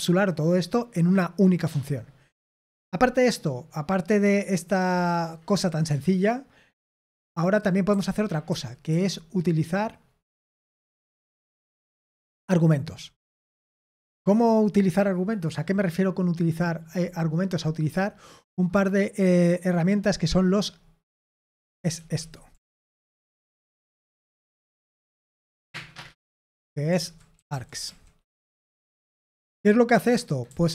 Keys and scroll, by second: 0.1-0.4 typing, 6.8-8.8 typing, 12.6-13.5 typing, 21.7-25.3 typing, 23.0 Escape, 26.7-28.3 typing.